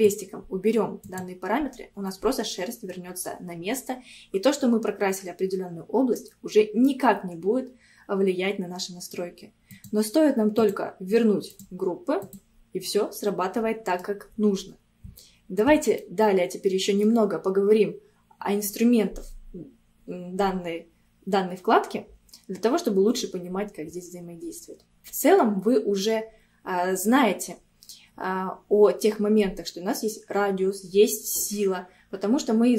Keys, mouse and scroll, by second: 1.1 click, 2.1-3.8 middle drag, 3.8 scroll up 2, 6.2-9.2 middle drag, 9.7-12.8 drag, 12.8 scroll down 2, 13.2-14.5 middle drag, 14.5 scroll up 1, 15.2-19.1 shift+middle drag.